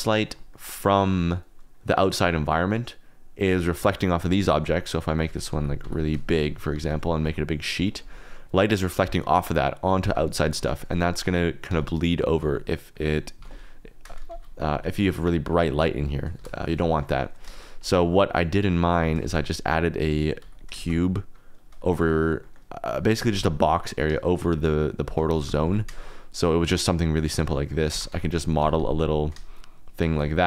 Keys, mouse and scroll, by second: 0.5 shift+click, 4.4 click, 4.7 click, 5.2-6.8 typing, 6.3 click, 8.0 click, 9.8 click, 10.0 g, 10.5 Escape, 11.2 click, 11.6 s, 12.4 z, 14.7 s, 15.0 click, 16.3 KP_0, 17.4 shift+drag, 18.7 click, 19.2 shift+a, 20.3 x, 20.7 shift+a, 22.4 click, 23.1 g, 23.3 y, 25.4 g, 25.6 y, 26.6 shift+click, 26.8 middle drag, 27.3 shift+click, 27.7 click, 27.9 Tab, 28.1 3, 28.2 click, 28.6 g, 28.8 z, 30.3 click.